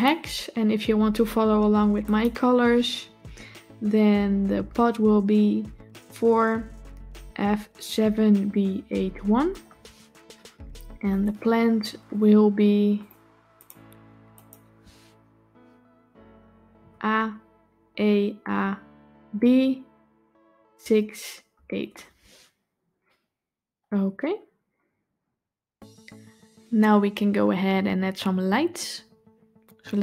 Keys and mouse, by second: 12.8 click, 13.4 click.